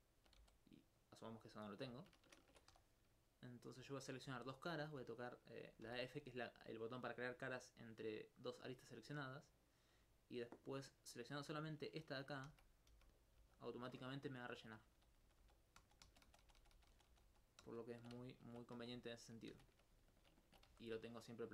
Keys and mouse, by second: 0.0 alt+right click, 0.4 alt+x, 1.0 click, 2.5 ctrl+Tab, 2.7 ctrl+2, 2.9 right click, 3.6 shift+right click, 5.9 f, 9.5 right click, 12.5 f, 12.9 f, 13.4 f, 15.0 ctrl+z, 15.2 ctrl+z, 15.2 ctrl+z, 15.4 ctrl+z, 18.4 alt+click, 18.8 alt+Tab, 19.5 shift+space.